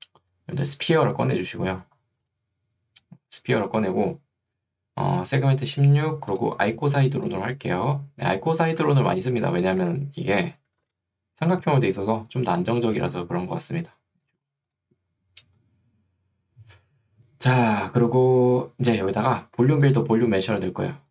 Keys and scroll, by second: 2.2 2, 9.0 ctrl+2, 9.8 Escape, 10.8 n.